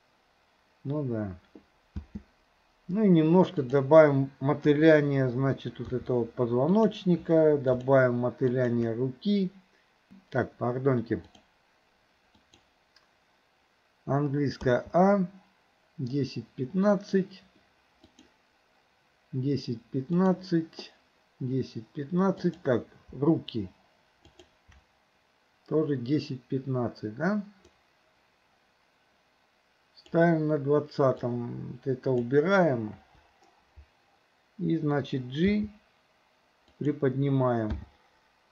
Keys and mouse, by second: 2.0 space, 4.7 KP_3, 6.0 r, 7.7 shift+click, 8.6 click, 11.2 click, 12.5 click, 14.7 a, 18.2 click, 20.2 click, 22.5 click, 24.4 shift+click, 27.7-30.2 drag, 31.2-32.3 drag, 33.0 Delete, 35.5 g, 37.8 i.